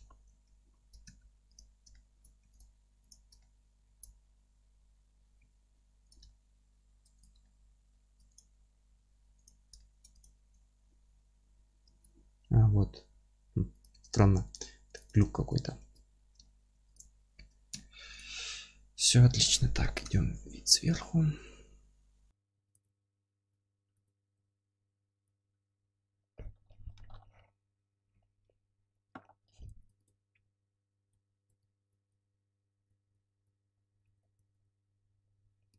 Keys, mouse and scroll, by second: 0.3 Tab, 1.0 1, 1.5 click, 1.9 alt+middle click, 2.4 3, 2.5 click, 3.4-6.1 alt+middle drag, 3.8 alt+e, 4.8 Escape, 6.1 click, 6.3 alt+middle click, 7.2 click, 7.4 alt+middle click, 8.3 click, 8.6-9.4 middle drag, 8.9 F3, 9.4 click, 9.8-10.2 alt+middle drag, 10.2 click, 10.6-13.8 alt+middle drag, 10.9 alt+z, 11.8 alt+e, 13.8 click, 14.1 alt+middle click, 15.0 click, 15.3-16.9 alt+middle drag, 15.8 ctrl+x, 16.9 click, 17.4 ctrl+x, 17.7-18.1 alt+middle drag, 18.1 click, 18.7 scroll down 1, 19.3-22.6 alt+middle drag, 20.0 KP_7, 20.9 scroll down 1, 21.5-22.2 scroll up 1, 22.2 Tab, 22.6 ctrl+click, 22.8 alt+q, 23.1 scroll up 1, 23.5 click, 23.6 z, 23.8 scroll down 1, 24.3 Tab, 24.7 scroll up 1, 24.9 s, 25.2 click, 25.3 scroll down 1, 25.5-30.0 middle drag, 25.6-27.2 scroll up 1, 30.0 shift+d, 30.5 Escape, 31.1 alt+middle click, 31.6 g, 31.9 click, 32.9 Delete, 33.1 click, 34.2 p, 34.3 Tab, 34.5 click, 34.7 alt+middle click, 34.8 alt+q, 35.7 KP_7.